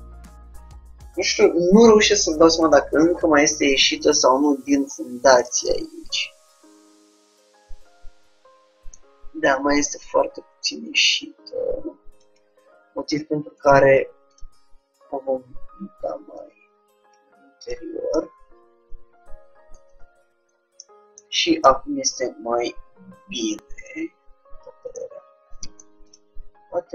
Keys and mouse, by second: 4.1-5.7 right drag, 5.0-7.5 middle drag, 10.2-11.8 drag, 13.7 Tab, 14.5-16.1 drag, 16.4-18.1 drag, 18.2-19.9 middle drag, 20.1 Tab, 20.9-23.6 middle drag, 25.8 Tab, 26.1-26.9 drag.